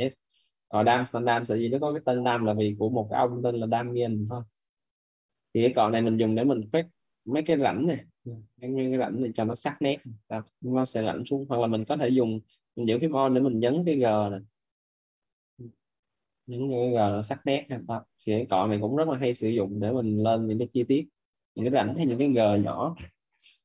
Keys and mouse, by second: 6.2 click, 10.3 alt+right click, 11.0 alt+right click, 12.8 alt+click, 15.9 alt+click, 17.2 alt+right click, 20.8 alt+right click, 21.4 alt+right click.